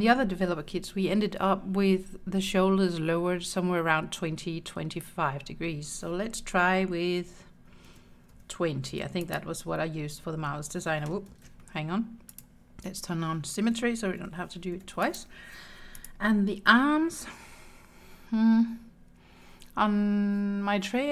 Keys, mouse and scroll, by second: 7.9 r, 8.3 2, 9.0 0, 9.3-11.0 drag, 11.4 ctrl+z, 12.3 click, 13.8 r, 14.2 2, 14.8 0, 15.1 click, 16.0 click.